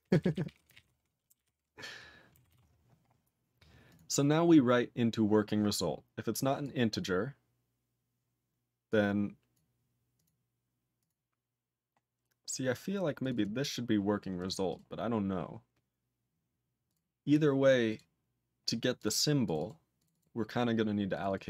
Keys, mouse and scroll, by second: 0.0 ctrl+space, 0.1 ctrl+n, 0.2 ctrl+n, 0.3 ctrl+n, 0.4 ctrl+n, 0.6 ctrl+g, 0.7 ctrl+e, 1.3 ctrl+-, 2.5 ctrl+s, 3.2-3.9 scroll down 1, 3.9 click, 3.9 click, 4.4 click, 4.7 scroll down 4, 6.3 click, 6.6 click, 7.0-7.9 scroll down 5, 8.5 scroll down 5, 8.9 click, 9.5 click, 10.1 click, 10.2 click, 11.0 click, 11.0 click, 12.1 scroll down 1, 13.2 click, 13.3 click, 13.3 double click, 13.4 double click, 14.4 click, 14.4 click, 14.7 click, 14.7 click, 15.2 click, 16.8 click, 16.9 click, 17.4 click, 17.6-18.4 typing, 17.9 click, 19.0 click, 19.0 click, 19.1 double click, 19.2 double click, 19.4 click, 19.5 click, 19.6 double click, 19.6 double click, 20.0 click, 20.0 click, 20.1 double click, 20.2 double click, 21.1 click, 21.2 click, 21.2 double click, 21.3 click, 21.3 double click.